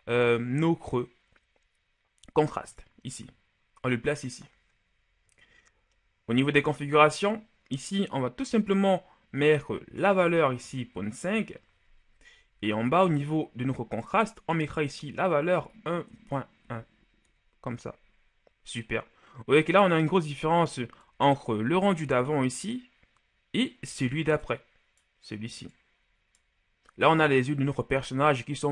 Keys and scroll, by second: 10.7 KP_Decimal, 10.9 KP_5, 11.2 Return, 15.5 KP_1, 16.0 KP_Decimal, 16.5 KP_1, 17.1 Return.